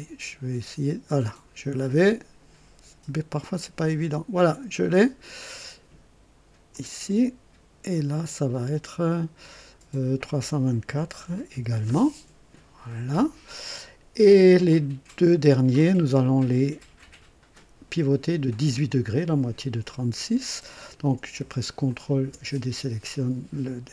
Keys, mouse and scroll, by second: 4.4 click, 6.7 click, 10.9 KP_3, 11.2 KP_2, 11.5 KP_4, 11.8 Return, 14.7-15.5 right drag, 21.9 ctrl+click.